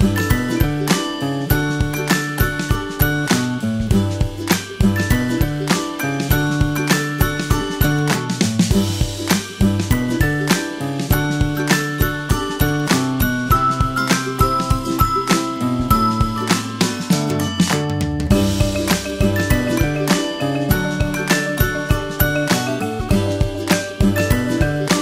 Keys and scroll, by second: 11.0 super+t.